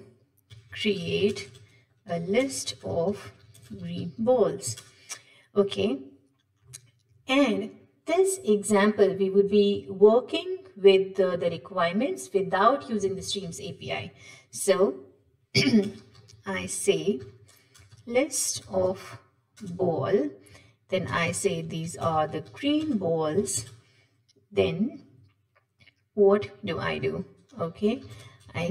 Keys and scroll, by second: 19.6 Return, 20.4 Tab.